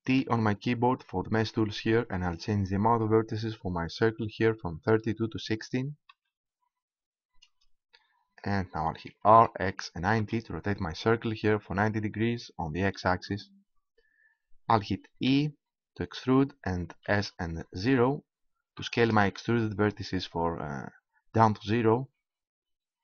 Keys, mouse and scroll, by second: 0.2 t, 2.9-4.6 drag, 9.1 r, 15.3 e.